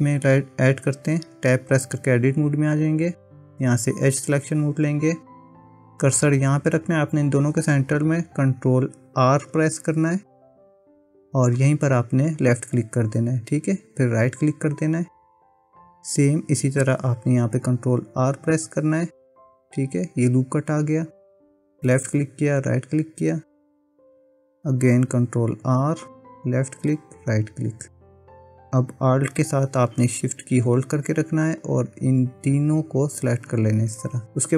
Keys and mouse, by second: 1.4 Tab, 4.5 click, 9.3 ctrl+r, 18.2 ctrl+r, 25.6 ctrl+r, 31.6 alt+shift+click, 33.0 alt+shift+click.